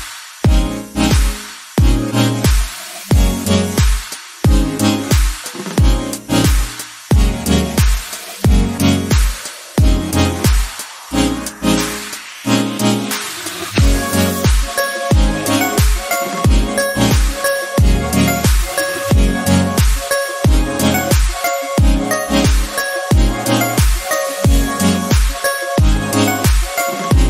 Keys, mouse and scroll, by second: 0.2-1.3 drag, 1.3 ctrl+z, 1.5 scroll down 1, 1.6 middle click, 2.3 scroll up 3, 3.1 scroll down 1, 3.2 middle click, 3.8 click, 4.3 ctrl+z, 4.9 3, 5.1-7.0 drag, 7.0 Tab, 7.3 middle click, 7.7 Tab, 8.1 scroll down 1, 8.3-9.6 middle drag, 10.3 KP_1, 10.6-11.1 scroll up 2, 11.1 shift+middle click, 11.7-12.7 drag, 12.7 middle click, 13.3 1, 13.4 click, 13.8 KP_1, 14.4-15.5 drag, 15.5 Tab, 15.7 scroll down 1, 15.9 middle click, 16.8-17.2 scroll down 1, 17.2 right click, 17.8-19.4 middle drag, 19.4 scroll up 3, 20.0 ctrl+z, 20.3 ctrl+z, 20.4 ctrl+z, 20.8 ctrl+z, 21.7 3, 22.9 ctrl+KP_Add, 23.4 x, 25.7-27.2 drag.